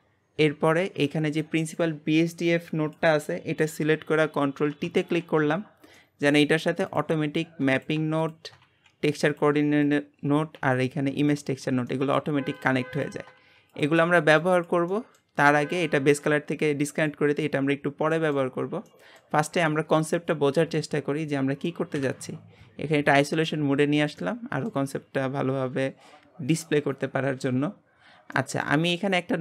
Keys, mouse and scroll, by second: 1.5 scroll down 3, 1.7-3.0 drag, 5.2 ctrl+t, 7.7-17.2 drag, 18.2 click, 19.2-21.9 middle drag, 21.9 KP_Divide, 22.9-23.6 scroll up 3, 23.6 middle click, 24.0 middle click, 24.2 shift+middle click, 28.6-29.4 middle drag.